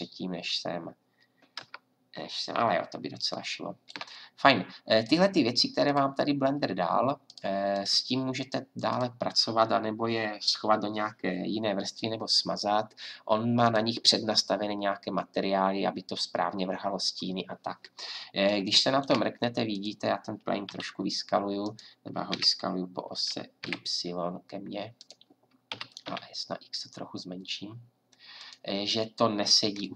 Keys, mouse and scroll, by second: 1.6 KP_0, 5.0-6.6 drag, 7.2-10.6 drag, 12.3 middle click, 12.7 middle click, 13.4-16.9 drag, 17.4 middle click, 19.7-21.6 drag, 20.6 s, 22.3 s, 25.7 s, 28.9-29.9 drag.